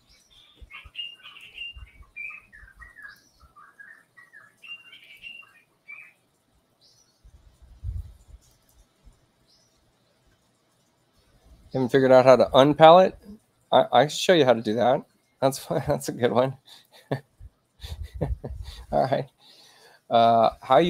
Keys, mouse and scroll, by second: 2.9 click, 5.0 click, 8.4 click, 16.7 click, 20.4 middle click.